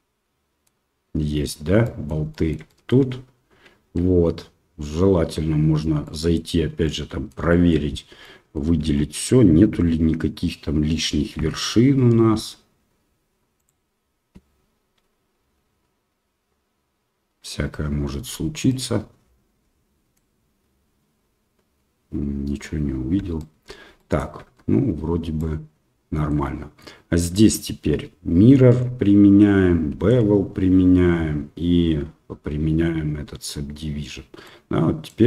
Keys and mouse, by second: 1.8 middle drag, 2.3 shift+middle click, 2.6 middle click, 5.0 Tab, 6.1 middle click, 6.8 middle click, 7.5 shift+middle click, 8.2 middle click, 8.8 a, 11.4 a, 11.9 m, 18.6-20.2 middle drag, 23.4 shift+middle click, 23.9 middle click, 24.9 Tab, 25.3-26.3 middle drag, 29.1 ctrl+a, 30.4 ctrl+a, 33.8 ctrl+a, 34.4-35.0 middle drag.